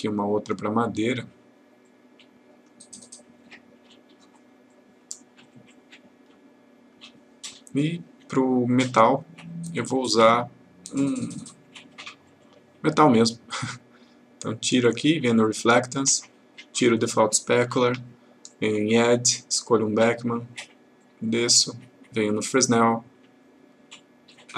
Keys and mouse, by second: 1.9-2.8 click, 4.8 click, 11.2 click, 14.7 click, 17.9 Delete, 18.5 click.